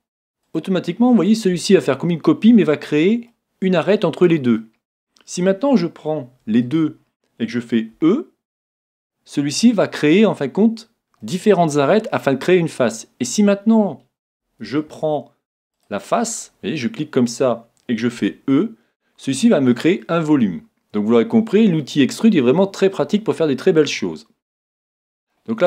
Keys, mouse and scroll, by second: 0.5-2.3 drag, 1.1-6.4 middle drag, 6.6-8.5 right drag, 7.9 e, 11.2-14.6 middle drag, 14.7 middle click, 14.9 ctrl+Tab, 16.4-18.1 right drag, 16.8-18.5 middle drag, 18.2 e, 19.4-21.1 drag, 19.7-21.6 middle drag.